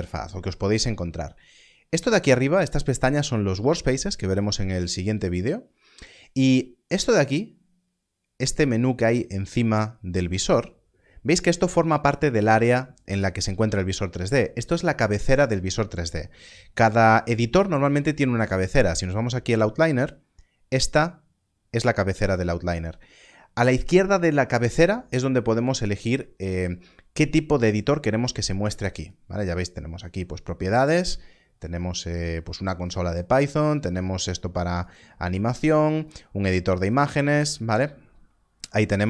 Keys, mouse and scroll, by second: 24.7 click, 28.9 click.